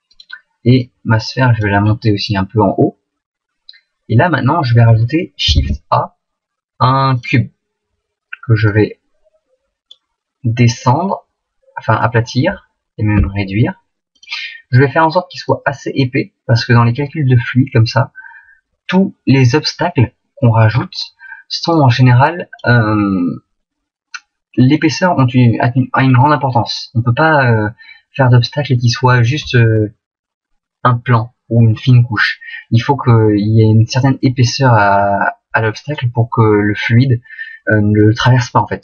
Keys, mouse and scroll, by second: 0.1 right click, 0.8 click, 1.9 middle click, 5.6 shift+a, 8.7 click, 10.8 click, 13.2 s, 14.2 click, 15.5 click, 17.0 middle click, 21.7 click, 23.1 middle click, 26.2 middle click, 34.4 click.